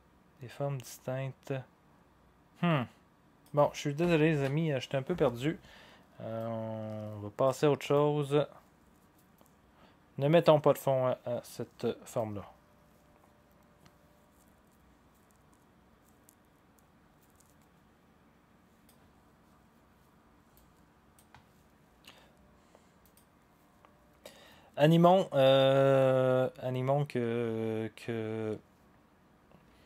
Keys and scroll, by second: 4.3 ctrl+z.